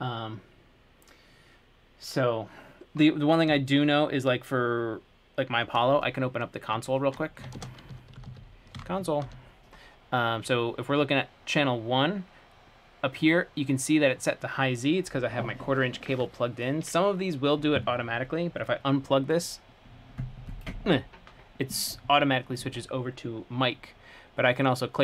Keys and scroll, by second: 7.8 alt+super+space, 8.1-10.0 typing.